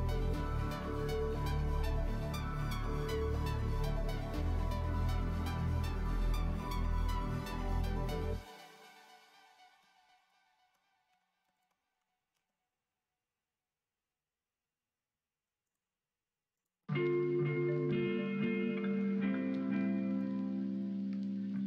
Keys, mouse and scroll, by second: 0.5 shift+click, 1.0 shift+click, 3.5 middle click, 4.4 shift+middle click, 5.5 shift+middle click, 6.0 middle click, 6.5 middle click, 8.7 middle click, 10.2 alt+click, 11.1 2, 11.5 alt+click, 12.3 ctrl+b, 16.6 click, 16.8 middle click, 17.8 click, 18.5 middle click, 20.7 shift+click, 21.1 shift+click, 21.5 shift+middle click.